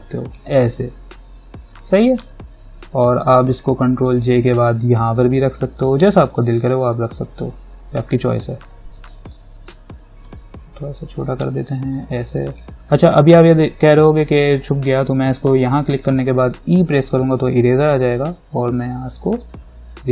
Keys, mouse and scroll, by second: 4.1 ctrl+j, 4.6-9.3 drag, 9.3 ctrl+-, 10.4 ctrl+t, 11.3 alt+click, 15.4 click, 16.9 e, 18.6-20.1 drag.